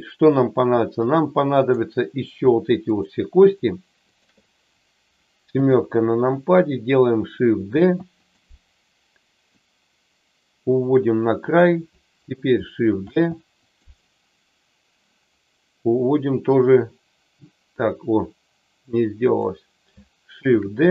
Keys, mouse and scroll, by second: 1.5 click, 2.9 shift+click, 3.4 shift+click, 4.1 shift+click, 5.5 KP_7, 7.7 shift+d, 8.1 click, 9.6-11.5 drag, 12.8 shift+d, 16.6-19.4 drag, 20.5 shift+d.